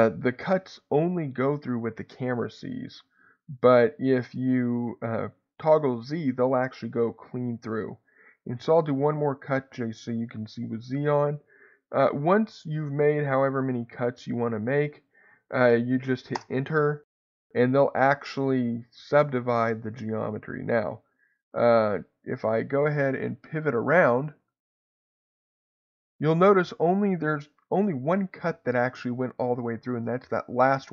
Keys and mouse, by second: 14.6-16.4 right drag, 19.9-20.9 middle drag, 21.7-24.1 middle drag, 28.0 shift+middle click.